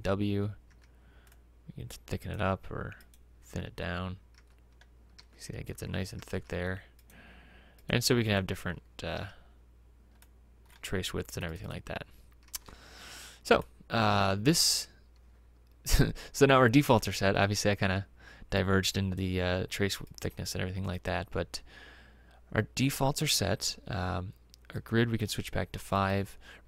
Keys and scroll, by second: 0.7 w, 4.4-6.4 typing, 9.2 w, 13.2 Escape.